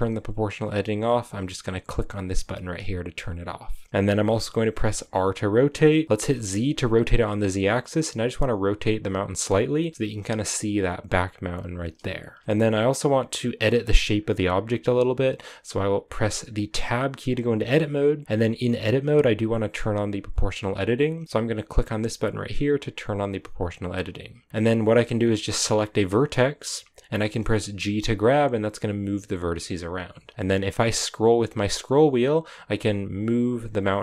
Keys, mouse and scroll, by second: 2.2-4.7 drag, 4.7 r, 9.7-12.4 scroll down 1, 12.4-15.1 scroll up 1, 15.1-16.3 scroll up 1, 16.3 Tab, 18.4 a, 23.1-25.8 drag, 25.8 right click, 27.5 g.